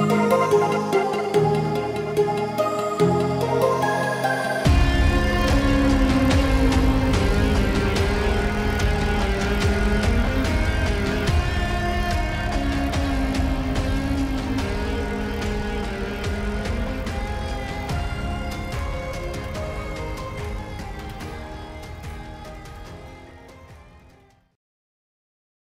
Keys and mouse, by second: 6.9 click, 14.2 click, 17.0 click, 19.4 ctrl+=, 20.6 space.